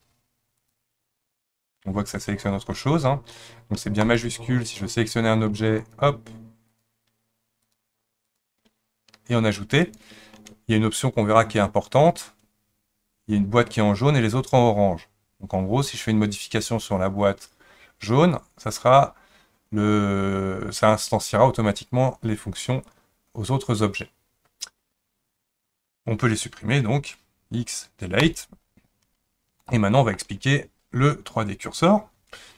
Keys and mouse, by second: 0.6 ctrl+click, 4.0 shift+click, 4.7 click, 6.7 shift+click, 7.6 shift+click, 8.3 shift+click, 9.8 shift+click, 27.0 x, 29.6-30.2 middle drag.